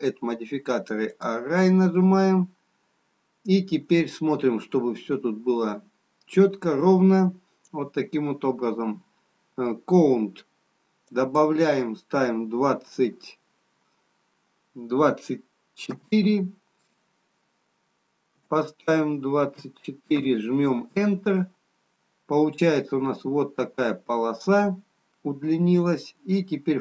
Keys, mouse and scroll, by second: 2.4 scroll down 1, 4.1 middle click, 12.1 click, 22.9-24.1 scroll down 4.